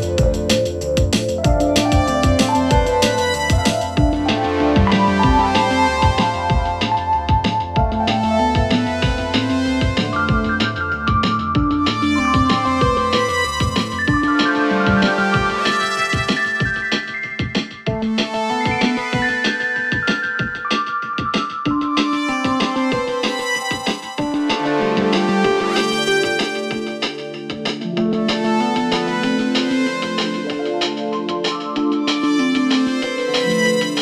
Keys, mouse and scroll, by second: 0.7 Tab, 1.4 p, 2.8 click, 3.1 scroll down 2, 3.2-3.6 scroll up 7, 3.6 scroll down 1, 3.8 click, 4.2 scroll down 1, 4.4 Tab, 4.7 click, 4.9 click, 5.1 drag, 5.2 click, 5.8 scroll up 1, 6.3 click, 7.3 click, 7.6 click, 8.7 click, 9.2 s, 9.8 click, 10.1 click, 10.6 shift+click, 11.0 click, 11.5 shift+click, 11.8-22.2 typing, 12.5 click, 13.4 click, 14.1 click, 14.9 click, 15.7 click, 16.4 click, 16.9 click, 17.5 click, 17.6 click, 18.4 click, 19.1 click, 19.7 click, 20.5 click, 21.3 click, 22.0 click, 23.7 click, 23.9 s, 24.7 click, 24.8 s, 25.5 click, 25.7 s, 26.5 click, 26.8 s, 27.4 click, 27.8 click, 28.1 s, 28.6 click, 28.8-29.8 right drag, 29.8 click, 30.0 s, 30.8 click, 31.3 click, 31.5 s, 32.6 click, 32.7 s, 33.6 click, 33.8 s.